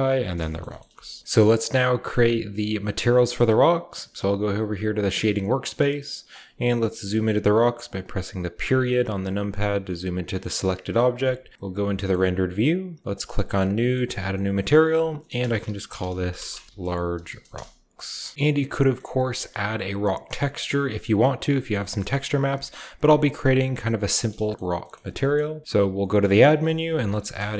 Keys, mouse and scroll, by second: 0.0-0.6 drag, 0.6-4.7 shift+middle drag, 0.8 typing, 1.1 shift+scroll down 1, 3.4-4.7 scroll up 1, 4.9-6.5 drag, 6.0-8.3 middle drag, 6.0-6.5 scroll down 1, 8.3 ., 9.1 scroll down 1, 9.3-11.5 middle drag, 10.2-11.0 scroll up 2, 11.0-11.9 typing, 13.0 click, 13.9 scroll up 1, 14.6 click, 15.3-17.8 typing, 15.6 shift+click, 15.6 shift+scroll up 1, 18.2-19.1 scroll up 1, 18.3 alt+Left, 20.4-23.8 drag, 20.9 scroll down 1, 22.0 shift+middle click, 22.3 a, 24.1 shift+click, 24.3 typing, 24.4-25.9 scroll up 1, 25.6-27.5 typing, 25.9-27.5 drag.